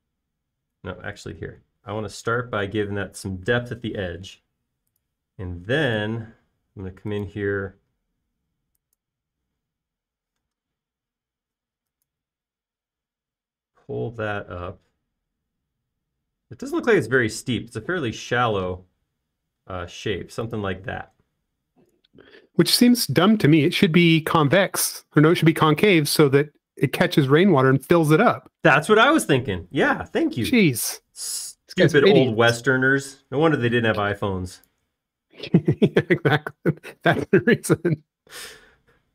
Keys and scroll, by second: 2.3 super+z, 3.0 p, 5.2 l, 10.6 space, 11.3 m, 13.3 Up, 22.0 space, 25.4 e, 34.5 space, 38.1 f.